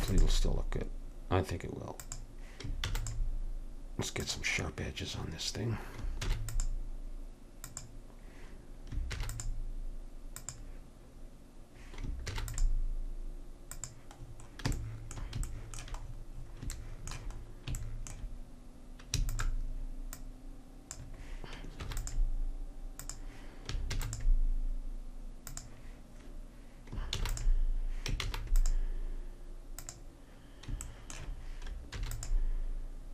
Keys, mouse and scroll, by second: 2.9 ctrl+r, 6.3 ctrl+r, 9.1 ctrl+r, 12.3 ctrl+r, 19.2 alt+c, 21.9 ctrl+r, 24.0 ctrl+r, 27.2 ctrl+r, 28.3 ctrl+r, 32.0 ctrl+r.